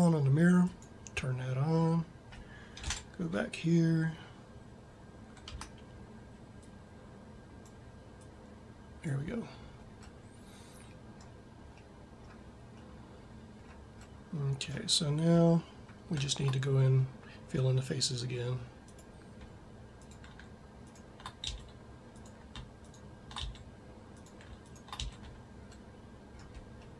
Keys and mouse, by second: 2.7 ctrl+Up, 5.3 Tab, 9.9-11.0 middle drag, 11.8 middle click, 21.3 f, 23.2 f, 24.8 f.